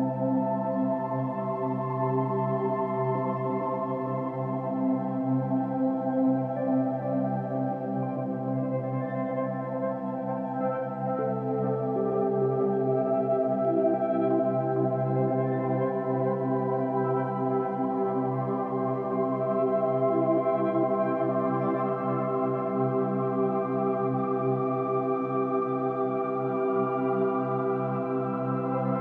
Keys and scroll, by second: 7.7 ctrl+-, 7.8 ctrl+=, 8.3 space, 10.0 space, 10.3 ctrl+=, 10.4 ctrl+-, 12.0 ctrl+-, 19.5 ctrl+=, 20.5 ctrl+-, 21.0 space, 21.1 ctrl+-, 21.5 ctrl+-, 23.1 ctrl+s, 27.5 ctrl+=, 27.8 ctrl+-, 28.8 ctrl+-, 28.9 ctrl+=.